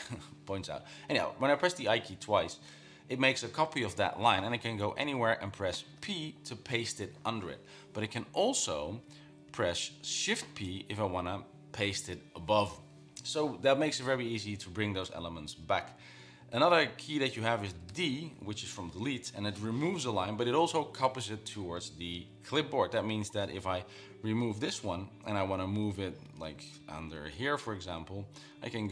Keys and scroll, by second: 5.1 Down, 5.3 Down, 5.5 Down, 6.3 p, 9.0 Escape, 9.4 Down, 9.9 Up, 10.1 Up, 10.8 shift+p, 17.0 Escape, 18.2 typing, 24.2 Down, 25.2-26.2 typing, 26.3 Up, 26.7 Down, 26.8 Down, 27.0 Down.